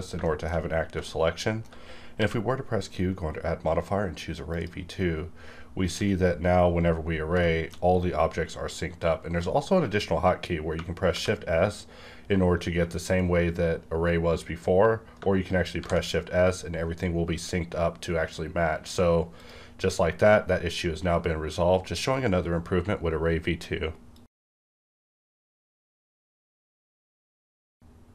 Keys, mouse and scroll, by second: 0.0 scroll down 2, 0.2-0.9 shift+middle drag, 1.0-2.1 shift+middle drag, 2.1 q, 4.5 click, 5.9 x, 6.7 scroll up 1, 7.4 shift+middle click, 8.4-8.8 scroll up 1, 10.7-11.1 scroll up 1, 11.1 shift+s, 15.2 shift+s, 15.8 shift+s, 17.3-17.8 scroll up 2, 17.8-19.0 scroll down 2, 19.0-19.4 scroll down 1, 19.4 click.